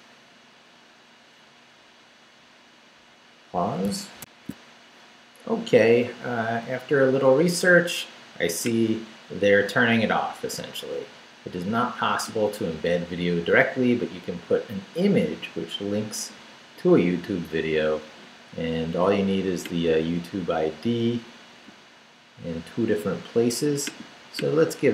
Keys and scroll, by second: 4.3 alt+shift+super+z.